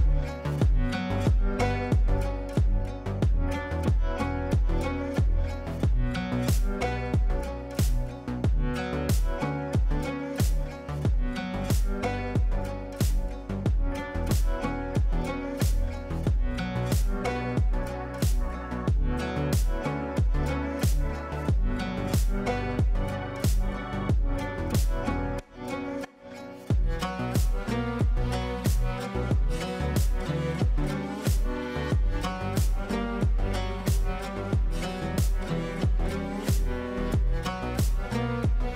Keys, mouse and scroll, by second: 7.5 Up, 8.9-11.8 shift+drag, 13.8 Down, 15.6 click, 15.6 click, 16.7 Down, 18.5 click, 19.8 right click, 20.8 click, 22.9 F3, 23.8 F4, 26.2 F2, 27.9-30.3 drag, 33.4 click.